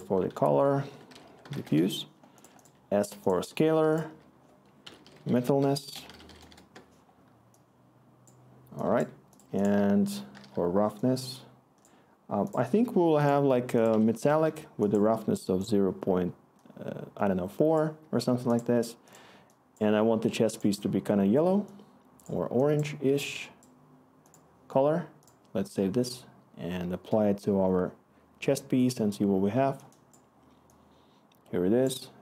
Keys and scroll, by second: 0.3 F2, 0.6-11.5 typing, 13.9 1, 14.4 Return.